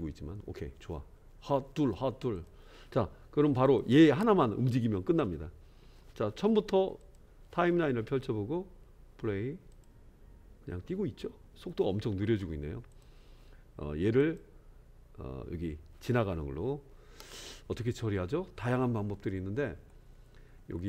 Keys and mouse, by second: 2.4 click, 3.6 click, 7.1 click, 9.8 click, 12.4 space, 12.9 click, 14.2 click.